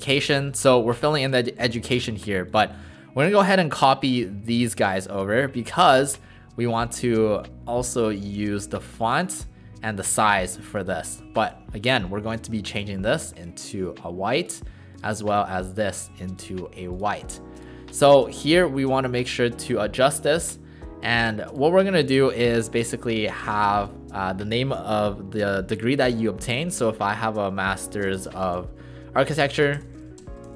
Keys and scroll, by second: 11.4 ctrl+a, 15.4 ctrl+a, 23.7 ctrl+a, 26.6-30.5 typing.